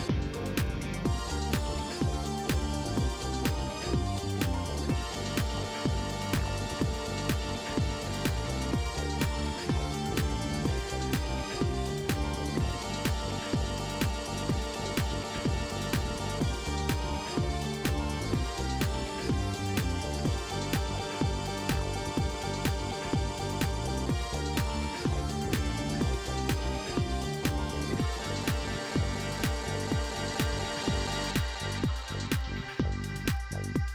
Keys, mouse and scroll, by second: 0.7 click, 2.5 click, 8.6 3, 9.6 Return, 11.0 shift+right click, 12.0 shift+right click, 12.5 shift+middle click, 13.9 middle click, 15.5 click, 15.8 space, 19.3 shift+middle click, 23.8 shift+right click, 25.0 shift+right click, 26.1 shift+right click, 27.1 shift+right click, 30.4 click, 33.6 shift+right click.